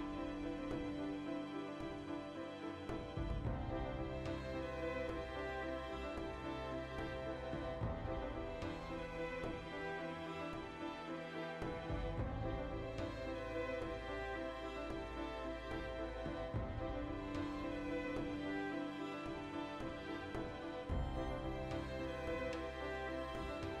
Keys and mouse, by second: 0.1-0.4 right drag, 0.9-5.6 middle drag, 5.6 right click, 5.7-9.5 middle drag, 5.8 Tab, 9.5 Tab, 9.7-10.0 middle drag, 10.0 right drag, 10.2-14.0 middle drag, 14.0 Tab, 14.3-15.5 ctrl+middle drag, 14.8 2, 15.5 alt+right click, 15.7 middle click, 16.0 alt+shift+right click, 16.2-19.3 middle drag, 18.5 Tab, 19.3 shift+right drag, 19.6-21.2 shift+middle drag, 21.2 shift+right click, 21.3-22.2 middle drag, 21.6 \, 22.2 right click, 22.3-23.8 ctrl+middle drag.